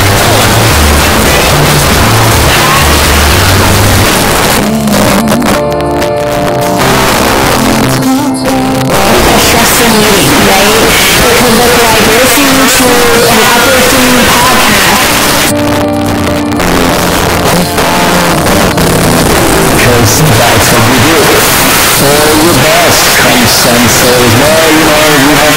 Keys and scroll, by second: 4.1 Page_Down, 8.2-9.1 typing, 15.0 Page_Down, 19.2 typing, 25.5 space.